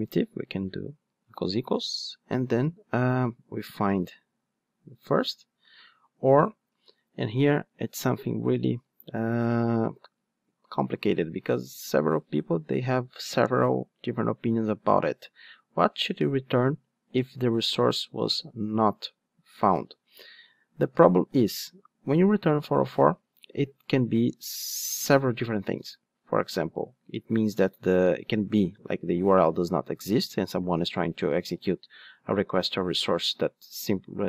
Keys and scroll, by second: 4.4 Return.